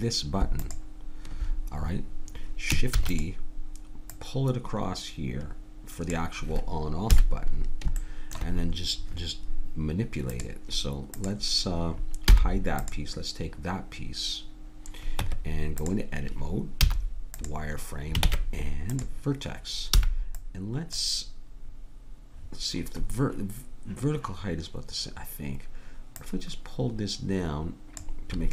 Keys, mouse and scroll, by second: 2.9 shift+d, 4.1-6.1 drag, 7.1 KP_1, 8.0-10.3 middle drag, 10.3 click, 12.3 h, 15.2 Tab, 16.8 z, 18.3 ctrl+Tab, 20.0 b, 26.2 click.